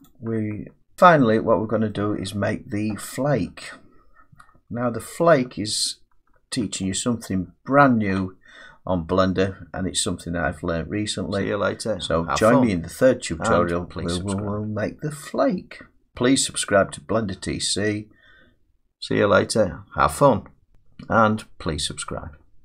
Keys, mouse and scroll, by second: 0.1 click.